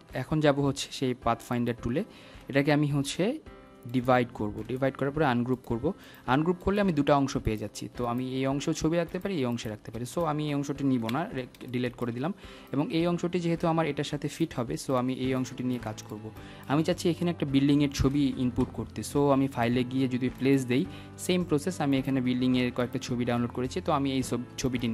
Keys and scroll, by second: 13.2 Delete.